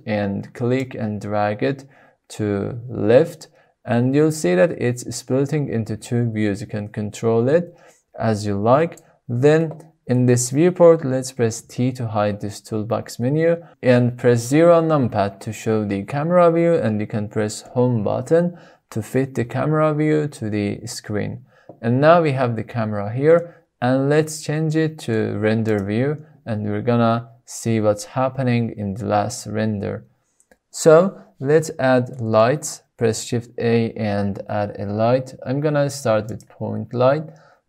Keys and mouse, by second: 0.9-5.8 drag, 6.3 click, 7.4-9.1 drag, 11.6 t, 14.3 KP_0, 17.5 Home, 23.2-25.0 middle drag, 25.6 drag, 31.6 middle click, 32.2-32.6 shift+middle drag, 33.1 shift+a.